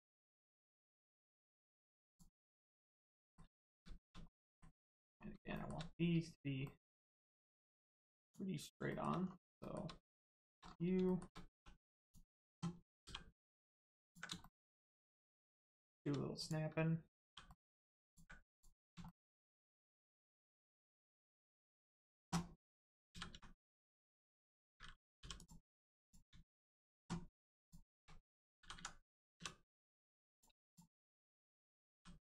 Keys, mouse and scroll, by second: 0.5 scroll down 1, 1.1 shift+middle click, 1.4 scroll down 1, 2.0 click, 3.2 shift+middle click, 3.5 scroll up 1, 4.2 middle click, 5.0 scroll up 1, 5.5 shift+middle click, 6.6 middle click, 6.7 middle click, 8.1 click, 8.8 shift+middle click, 9.1 scroll down 1, 9.5 shift+middle click, 11.5 middle click, 11.9 click, 13.3 middle click, 14.0 ctrl+click, 14.3 shift+middle click, 16.3 click, 17.2 g, 17.4 middle click, 18.0 ctrl+click, 18.5 click, 19.0 shift+middle click, 21.7 shift+click, 23.1 s, 25.3 click, 27.5 shift+click, 28.5 s, 28.7 x, 29.7 click, 30.6 shift+click, 31.9 s.